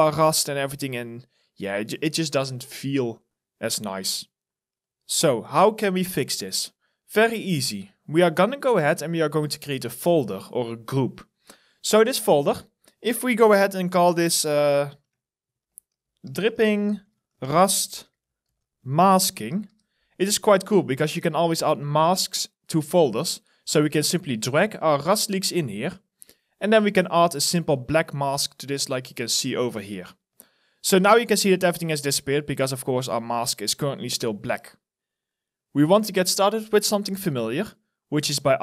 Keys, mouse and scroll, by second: 0.2 alt+right click, 1.0 alt+middle click, 1.4 alt+click, 2.0 alt+middle click, 7.1 alt+right click, 12.9 double click, 15.2-20.4 typing, 30.9 alt+middle click, 31.8 alt+click.